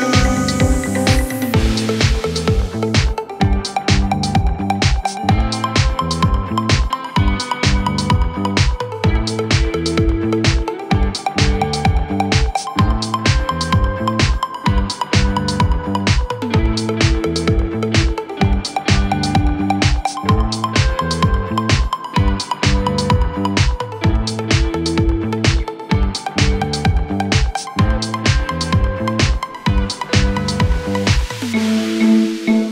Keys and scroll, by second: 17.7 Escape, 18.2 F3, 19.7 Escape, 19.8 F3, 20.0 Escape, 24.1 ctrl+g, 24.6 c, 25.0 F3, 25.2 Escape, 26.9 F3, 27.0 Escape.